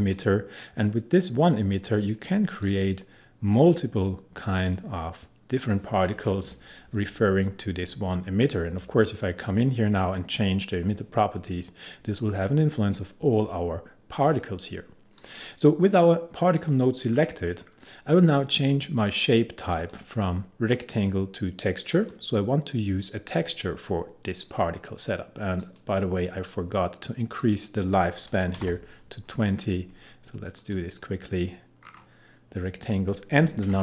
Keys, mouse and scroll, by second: 9.5 click, 15.2 click, 17.1-19.5 scroll down 1, 19.8 click, 25.6 click, 28.6-29.5 typing, 29.5 click, 29.5 click, 31.8-32.9 scroll down 1, 32.9 click, 33.4-33.8 typing.